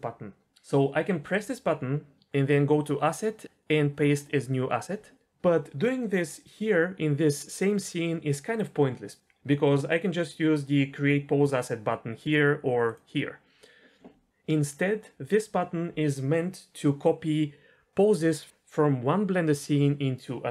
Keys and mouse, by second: 1.3 click, 2.8-5.1 drag, 13.0-13.8 drag.